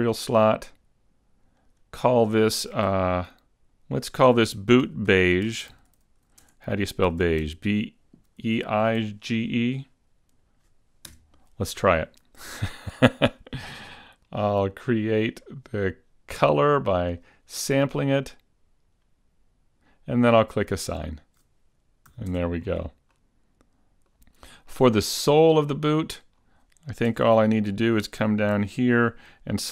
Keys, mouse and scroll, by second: 1.7 click, 4.3 click, 5.3 o, 14.2 scroll down 6, 15.4 click, 21.1 click, 22.2 a, 22.6 Tab, 22.7 scroll down 3, 23.2 middle click, 24.7 middle click, 26.5-27.4 scroll up 2, 27.4 Tab, 27.4 scroll up 1, 27.5 middle click, 28.3 a, 28.7 a.